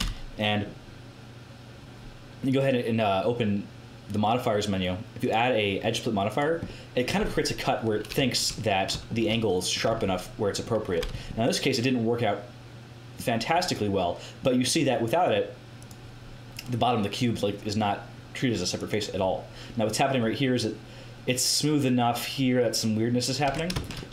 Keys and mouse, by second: 2.4-4.4 drag, 5.1-6.6 drag, 6.6 middle click, 7.6 middle click, 9.8 Tab, 11.0 Tab, 15.7-20.6 drag, 22.9 middle click, 23.4 Tab.